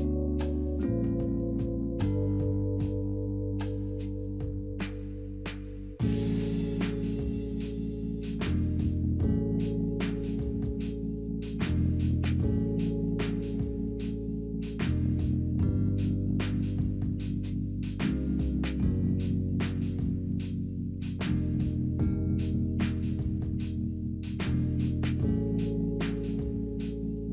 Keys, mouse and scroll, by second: 1.5-3.0 typing, 3.4 alt+middle click, 6.9 middle click, 7.1 w, 8.1 alt+middle click, 8.7 alt+click, 9.7 alt+middle click, 11.0 alt+middle click, 14.7 double click, 15.0 double click, 15.8 double click, 16.3 middle click, 19.7 double click, 19.9-20.8 typing.